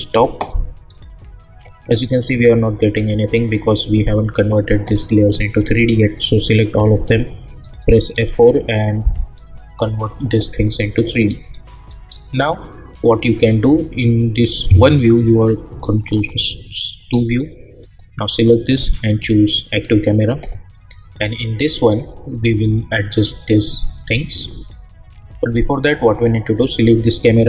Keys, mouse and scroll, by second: 0.8-2.6 scroll down 1, 6.3 click, 7.5 shift+click, 8.1 F4, 9.2 click, 11.8 scroll up 1, 13.4 click, 16.1 click, 21.6-22.9 scroll down 1, 22.9 click, 25.9 click.